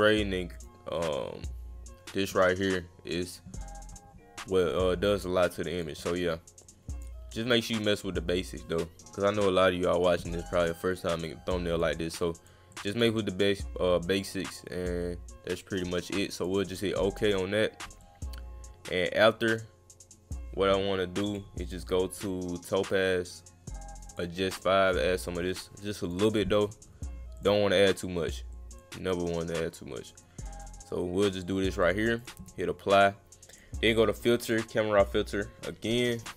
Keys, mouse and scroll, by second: 0.5 click, 4.7-5.8 drag, 6.6 click, 8.0 click, 11.2 click, 12.4 click, 12.7 click, 14.0 click, 16.4 click, 18.0-20.3 drag, 21.3 click, 24.1 click, 26.0 click, 27.3 click, 27.9 click, 28.5 click, 29.4 click, 31.8 click, 32.2 click, 33.5 click, 34.4 click.